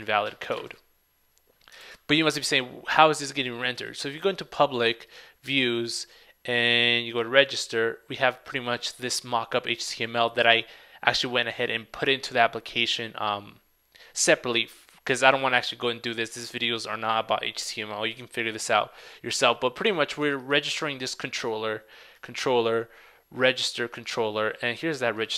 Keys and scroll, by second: 1.9 super+Tab.